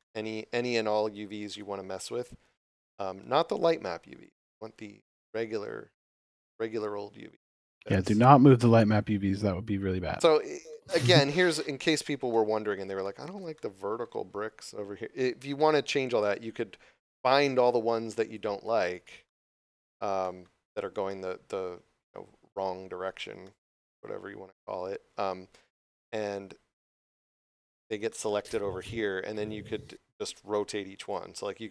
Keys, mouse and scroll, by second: 6.6 click, 7.3 scroll down 1, 8.3 shift+middle click, 9.4 scroll up 1, 10.6 middle click, 11.9 scroll up 1, 12.2 shift+middle click, 13.5 shift+middle click, 14.2 scroll up 1, 16.1 right click, 18.2 shift+right click, 18.8 shift+right click, 19.2 middle click, 20.1 shift+middle click, 20.6 shift+right click, 21.0 middle click, 23.3 shift+middle click, 26.3 scroll up 1, 27.9 scroll up 1, 28.5 scroll down 1, 28.8 scroll up 1.